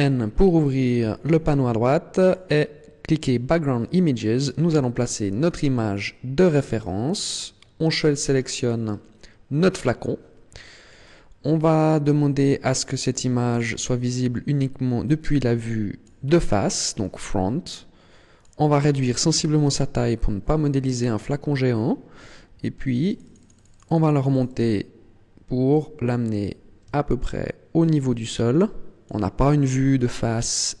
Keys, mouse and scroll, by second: 0.3-1.6 scroll down 14, 2.2 click, 3.2 click, 4.4 click, 5.4 scroll down 5, 9.9 click, 10.8-11.3 scroll up 2, 13.4 click, 18.4 click, 20.9-22.7 scroll up 6, 23.0 click, 23.2 click, 23.4 click, 23.6 click, 23.8 click, 23.9 click, 24.0 click, 24.2 click, 24.4 click, 24.5 click, 25.7 click, 29.5-30.8 scroll up 8.